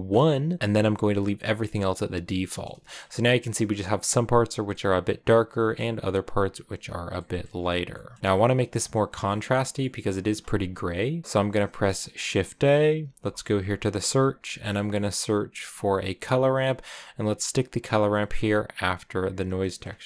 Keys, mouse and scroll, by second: 1.0 scroll down 2, 1.2-2.9 middle drag, 2.9-4.0 scroll up 2, 4.4 scroll down 2, 4.6-5.7 middle drag, 5.7-7.0 scroll up 2, 7.0 middle click, 7.3-7.8 scroll down 1, 7.8-15.4 middle drag, 19.1-20.0 drag.